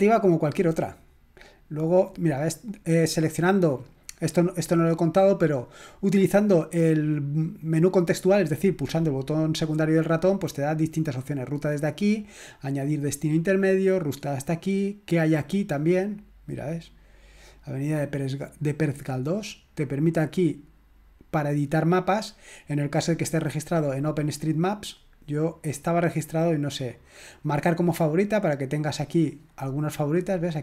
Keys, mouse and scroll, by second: 0.0-5.2 drag, 15.2 click, 19.2 click, 23.6-25.6 drag, 27.6 click, 29.4 click, 30.3 click.